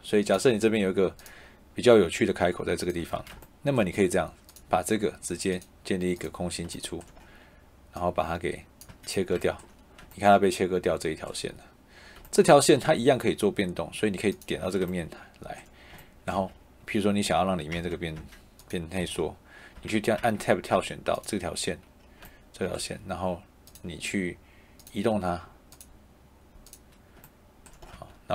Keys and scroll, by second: 2.9 Escape, 8.8 Escape, 16.2 Escape, 17.6 Tab, 18.9 Escape, 20.7 Tab, 27.8 Escape.